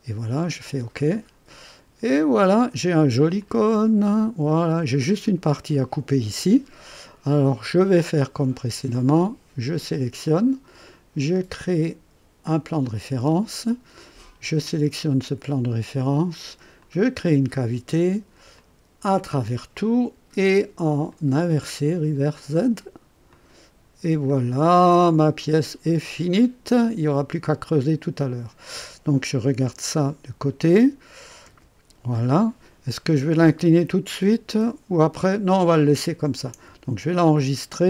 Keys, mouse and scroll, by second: 0.6 click, 1.5-3.2 drag, 3.4-5.2 drag, 6.5-7.2 drag, 9.1 click, 11.3 click, 12.8 click, 14.5 click, 16.8 click, 18.5 click, 19.1 click, 21.1 click, 22.3 click, 23.3 click, 24.3-26.4 drag, 26.6 click, 27.7-29.0 drag, 30.0 KP_1, 37.2 ctrl+s.